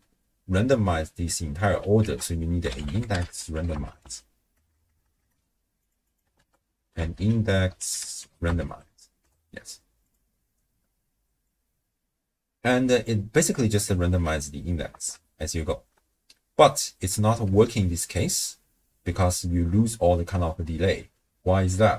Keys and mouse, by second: 1.3 click, 2.0 ctrl+a, 4.7 BackSpace, 4.8 BackSpace, 5.2 BackSpace, 6.1 click, 6.4 ctrl+a, 11.4-13.2 drag, 14.9 shift+space, 15.9 space, 17.5 shift+space, 18.5 space.